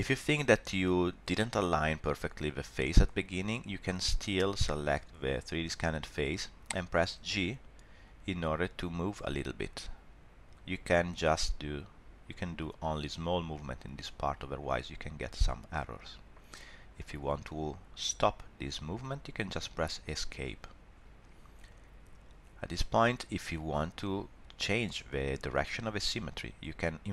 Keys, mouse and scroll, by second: 4.1 click, 6.6 g.